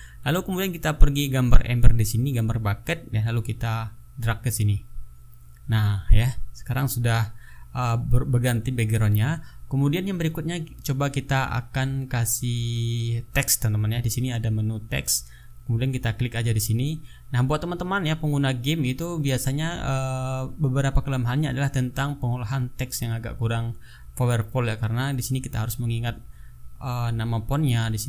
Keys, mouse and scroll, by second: 3.2 click, 4.6 click, 14.7 click, 16.8 click, 20.0-21.4 typing, 22.1 ctrl+a, 23.7 click, 25.2-26.4 typing.